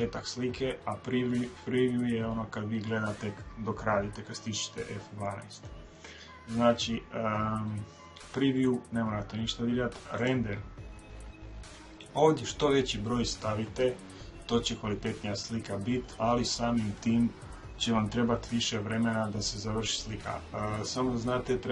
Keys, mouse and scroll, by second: 9.9-11.8 drag.